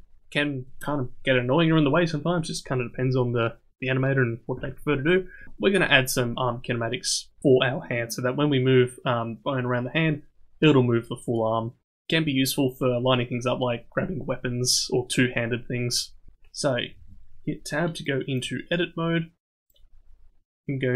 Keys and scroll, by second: 16.9 Tab.